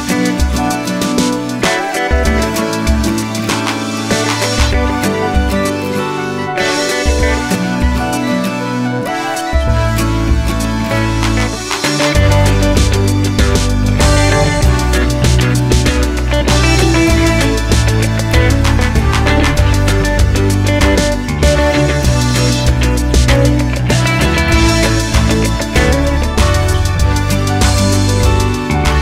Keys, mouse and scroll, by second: 11.8-13.3 drag, 14.3-15.5 drag, 18.4 click, 20.6 ctrl+z, 20.6-25.2 middle drag, 25.2 click, 26.2-29.0 drag.